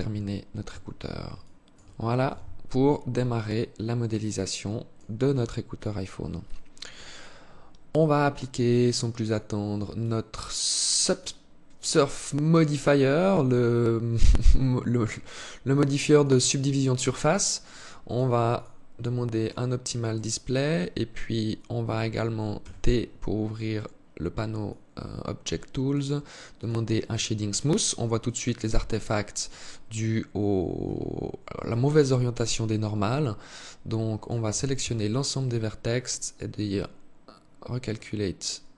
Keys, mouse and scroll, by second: 0.0 Tab, 0.7 alt+shift+click, 1.6 z, 1.9 scroll down 2, 2.7 alt+click, 4.7 alt+click, 8.5 click, 9.3 click, 11.9 alt+click, 13.7 alt+click, 15.0 alt+click, 17.3 click, 17.8 click, 18.7 click, 21.9 t, 23.9 click, 25.9 click, 27.3 scroll up 1, 30.1 Tab, 31.0 alt+click, 33.9 a, 34.1 a.